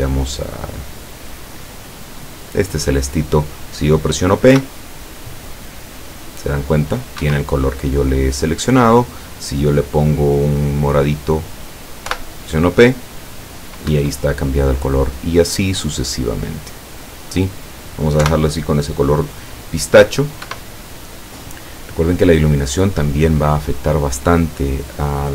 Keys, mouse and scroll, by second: 1.1 click, 4.6 p, 7.3 Escape, 8.7 click, 10.5 click, 12.1 p, 13.9 Escape, 15.4 click, 16.4 click, 18.2 p, 20.5 Escape, 21.8 scroll down 2, 23.2-23.9 scroll up 4.